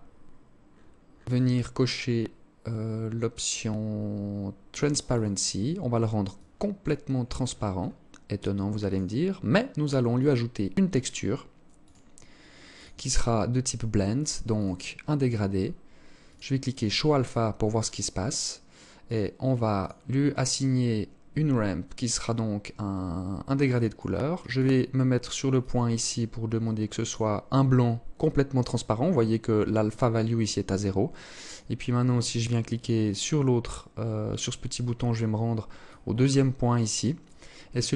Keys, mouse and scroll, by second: 1.8-3.8 scroll down 6, 3.8 click, 4.3 click, 5.5 click, 6.3-7.2 scroll up 10, 8.0 click, 9.3 click, 11.0 click, 11.9 click, 14.7 scroll down 2, 14.8 scroll up 1, 15.4 click, 18.2 click, 18.9 click, 22.8 click, 23.5 click, 23.7 click, 24.7 click, 27.7 click, 32.2 click, 35.0 click, 36.3 click, 37.5 click.